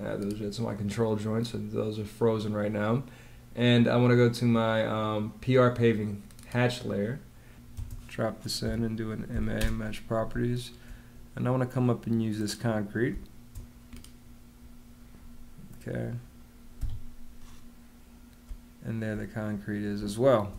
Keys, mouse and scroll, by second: 7.6 space, 8.5 m, 9.2 a, 9.5 space, 13.0 space, 16.7 Escape, 18.3 space, 20.1 space.